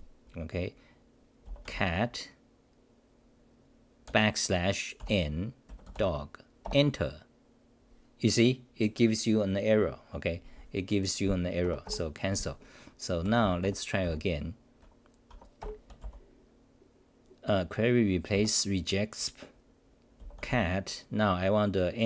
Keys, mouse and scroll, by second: 8.7 Return, 11.6 ctrl+g, 11.8 ctrl+g, 14.0 Up, 15.3 Home, 15.6 ctrl+g.